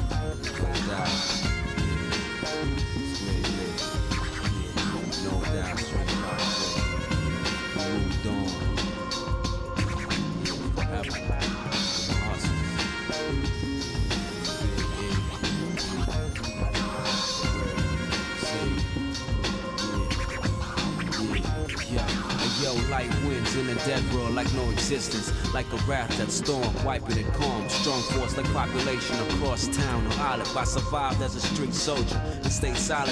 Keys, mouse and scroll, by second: 3.0-5.7 shift+middle drag, 5.9 shift+middle click, 7.0 click, 7.4 ctrl+Tab, 9.1 shift+middle click, 10.4 ctrl+z, 14.2-15.4 drag, 17.4-19.4 drag, 19.8 shift+middle click, 22.1 e, 30.5-32.7 shift+middle drag, 33.0 middle click.